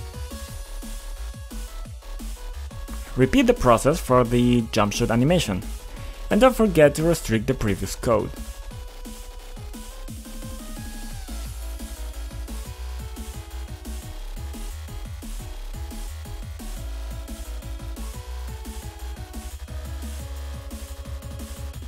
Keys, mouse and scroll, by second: 1.9 click, 2.2 click, 2.4 ctrl+click, 3.0 click, 3.2 double click, 4.2-5.8 typing, 6.7 click, 6.8 double click, 7.8-9.5 typing, 10.0-10.7 scroll up 2, 10.7 click, 12.8 click, 12.9 click, 14.1 b, 15.6 click, 15.9 ctrl+click, 17.1 click, 17.2 double click, 18.4-21.2 typing.